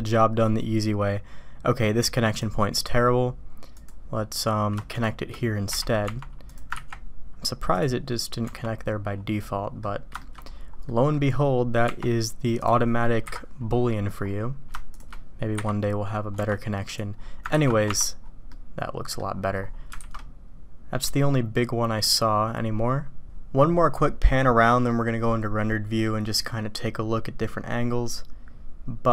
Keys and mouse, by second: 2.3 click, 3.7 click, 6.0 Tab, 6.4 click, 6.7 ctrl+x, 7.8 click, 8.4 Tab, 9.4-9.8 drag, 10.2 shift+drag, 10.9 click, 12.5 click, 13.2 KP_Decimal, 14.9 shift+click, 15.5 j, 16.3 Tab, 16.9 click, 17.5 ctrl+x, 17.8 Tab, 18.5-19.2 drag, 19.9 alt+a, 20.2-21.6 drag, 22.1-28.5 drag, 28.5-29.1 middle drag.